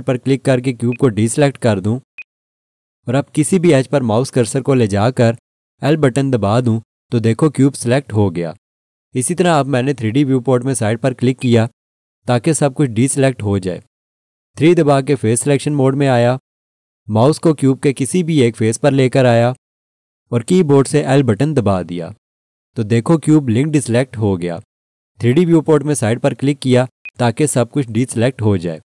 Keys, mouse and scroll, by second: 0.9 click, 2.2 alt+click, 5.6 l, 11.4 click, 15.3 3, 21.1 l, 27.0 click.